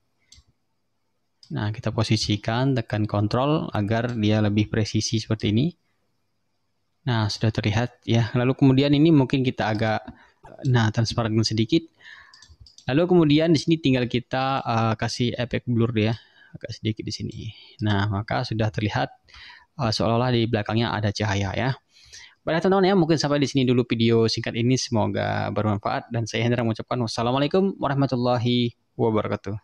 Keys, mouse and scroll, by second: 1.5-4.3 drag, 5.5-7.6 ctrl+drag, 9.8 click, 10.4 click, 12.4 click, 12.8 click, 13.6 ctrl+scroll up 2, 14.6 click, 16.2-17.6 drag, 17.9 click, 18.9-19.2 ctrl+scroll down 2, 21.7 ctrl+scroll up 1.